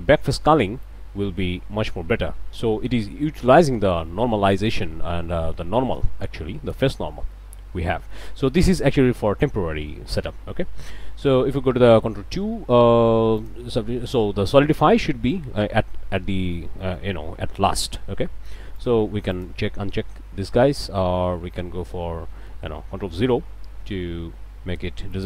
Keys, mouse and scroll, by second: 0.8-3.2 drag, 5.4 scroll down 1, 5.8 click, 7.3-8.3 drag, 9.9 click, 10.5 Tab, 12.1 ctrl+2, 13.4 alt+shift+click, 16.8 click, 18.8 click, 19.3 click, 22.3 click, 23.3 ctrl+0, 25.1 click.